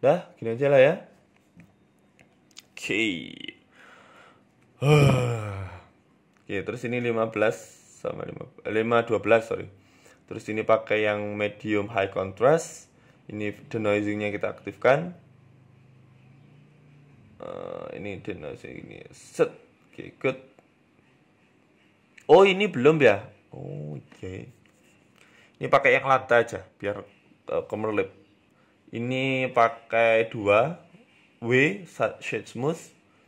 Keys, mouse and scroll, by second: 2.9 click, 6.2 click, 8.4 scroll down 10, 8.9 click, 9.7 click, 9.9-10.3 scroll down 2, 10.4 click, 12.4 click, 12.7 scroll down 1, 13.2 click, 13.2 scroll down 1, 13.4 click, 18.3 click, 18.3 scroll down 7, 18.7 click, 19.1 click, 20.5 scroll up 2, 20.5 scroll down 1, 21.8 right click, 21.9-22.8 scroll up 3, 22.1 shift+middle click, 22.8 shift+middle click, 24.3 click, 26.9 right click, 27.6 right click, 29.6 click, 30.2 click, 31.2 w, 32.1 right click.